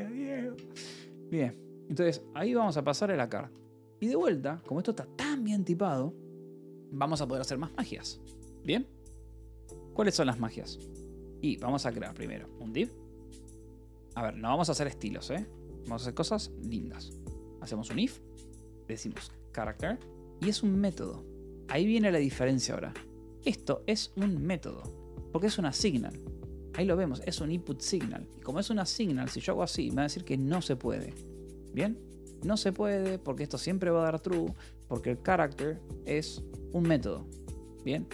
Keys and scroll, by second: 1.4-2.4 typing, 3.8 c, 4.0 Escape, 4.4 a, 8.3 =, 9.0 k, 9.5 Return, 10.4 alt+Tab, 11.1-16.0 typing, 14.3 Return, 17.1-23.9 typing, 23.8 Escape, 25.0 ctrl+s, 25.2 h, 26.3 shift+k, 27.8 Escape, 28.1 l, 28.8 a, 29.2 Escape, 30.8 a, 31.2 Escape, 31.6 h, 33.8-34.8 typing, 36.7 Escape, 37.6 l.